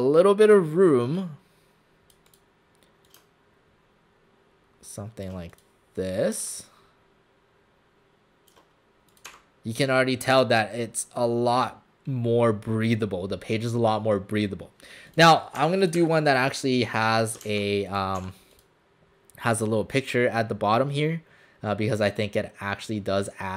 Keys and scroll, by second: 9.3 alt+shift+w, 15.6 Delete, 16.0 Delete, 17.5 ctrl+z, 18.2 w.